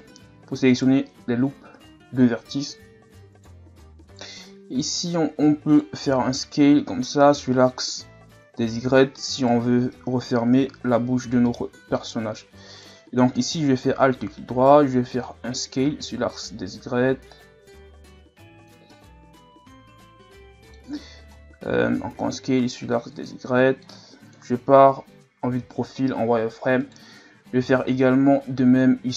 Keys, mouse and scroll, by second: 0.7 alt+right click, 3.3 alt+right click, 4.1 alt+right click, 4.7 s, 6.0 s, 11.4-12.7 middle drag, 12.7 right click, 13.6 alt+right click, 14.6 s, 18.9-22.0 middle drag, 22.0 s, 23.5 middle click, 24.4 KP_3, 25.5 z, 26.8 alt+right click, 27.6 s.